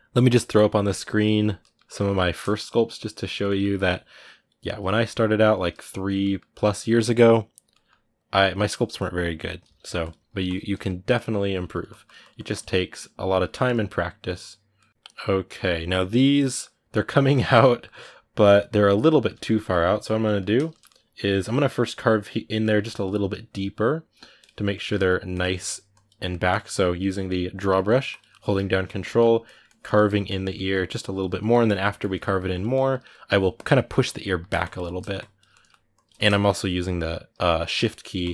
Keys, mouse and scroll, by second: 1.4 shift+middle click, 1.7 shift+click, 2.1 middle click, 2.4 shift+click, 2.8 middle click, 3.6-5.4 drag, 5.4 shift+middle click, 5.7 shift+click, 6.0 shift+middle click, 6.5 click, 7.5-9.4 ctrl+middle drag, 9.4 g, 9.6 f, 10.1 click, 10.5 ctrl+middle click, 10.9 click, 11.2 ctrl+middle click, 11.5-12.8 drag, 12.8-24.2 middle drag, 24.2 click, 24.5 ctrl+middle click, 25.1 ctrl+click, 25.3 middle click, 25.7 ctrl+click, 26.0 ctrl+middle click, 26.3-27.5 ctrl+drag, 27.5 middle click, 27.9 ctrl+click, 28.1 middle click, 28.6 ctrl+click, 28.8 middle click, 29.2 ctrl+click, 29.7 middle click, 30.0 ctrl+click, 30.3 ctrl+middle click, 30.7 ctrl+click, 31.6 middle click, 31.8 ctrl+click, 32.0 middle click, 32.3 ctrl+click, 32.5 middle click, 33.3 ctrl+click, 33.5 middle click, 33.8 ctrl+click, 34.0 middle click, 34.4 shift+click, 34.6 middle click, 34.9 shift+click, 35.3 middle click, 35.7 shift+click, 35.9 middle click, 36.2-37.2 shift+drag, 37.2 middle click, 38.0 ctrl+click, 38.2 middle click.